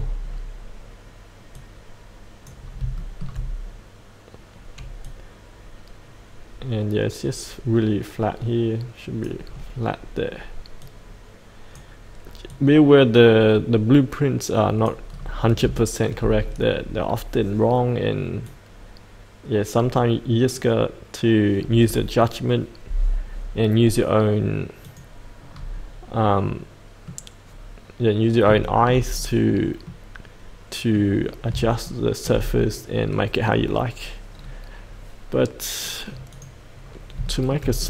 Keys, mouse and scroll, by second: 0.2-1.5 scroll down 1, 1.5 click, 2.6 scroll up 1, 2.9 shift+middle click, 5.0-9.5 drag, 9.5-10.8 scroll down 1, 10.8-15.1 drag, 15.1-15.6 scroll up 1, 15.7 shift+middle click, 16.4-18.4 scroll down 1, 18.4-25.5 drag, 25.5-26.4 scroll up 1, 26.4 middle click, 27.4-28.4 scroll up 1, 28.6 shift+middle click, 29.1-29.8 scroll down 1, 29.8-30.9 middle drag, 31.1-31.5 scroll down 1, 31.8 shift+middle click, 32.5-34.0 middle drag, 34.3 scroll down 1, 34.8-36.3 scroll up 1, 36.3 click, 36.8-37.1 scroll up 1, 37.2 shift+middle click.